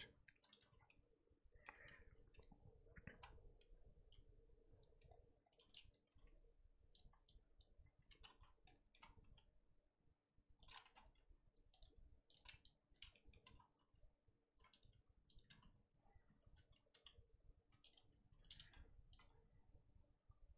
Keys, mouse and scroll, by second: 0.6 Tab, 0.7 scroll down 3, 0.9-1.7 middle drag, 1.7 Tab, 3.1 ctrl+KP_Add, 4.0 ctrl+KP_Add, 5.9 click, 6.0 g, 7.6 click, 8.3 ctrl+z, 9.2 g, 12.9 click, 13.4 s, 15.5 Tab, 16.0-16.4 scroll down 1, 16.4 Tab, 17.0 g, 17.9 Tab, 18.3 Tab, 18.6 g, 19.3 scroll down 2.